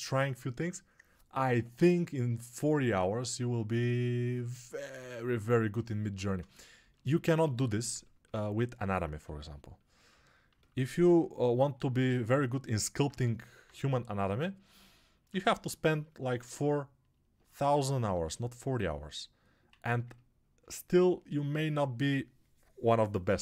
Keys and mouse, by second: 7.2 1, 9.2 x, 18.0 2, 19.6 1.